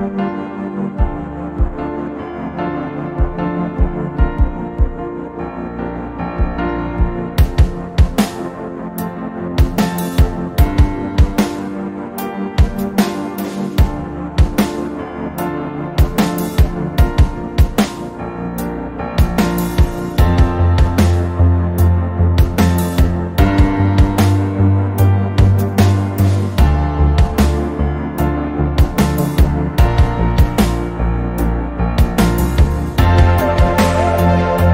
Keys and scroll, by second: 1.4 ctrl+i.